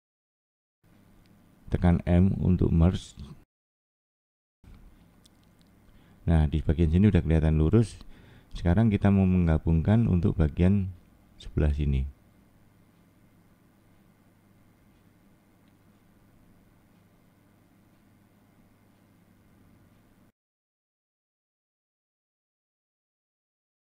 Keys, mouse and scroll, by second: 1.1 m, 2.5 middle click, 2.9 scroll down 2, 3.4 middle click, 4.6 middle click, 7.3 middle click, 7.9-8.3 scroll up 1, 9.0 click, 9.5 middle click, 11.4 middle click, 12.4 click, 12.8 middle click, 13.8 click, 15.4 click, 17.8 middle click, 19.5 click, 20.2 middle click, 21.4 click.